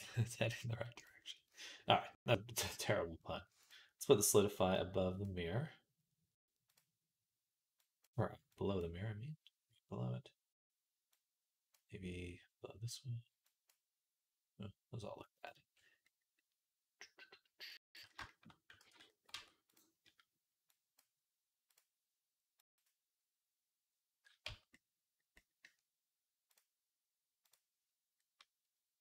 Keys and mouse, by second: 17.5-19.6 drag, 18.7 ctrl+s, 19.1 Tab, 19.6 middle click, 20.5-21.6 drag, 21.6 middle click, 22.5 click, 22.7-26.3 middle drag, 24.3 Tab, 26.3-29.0 drag.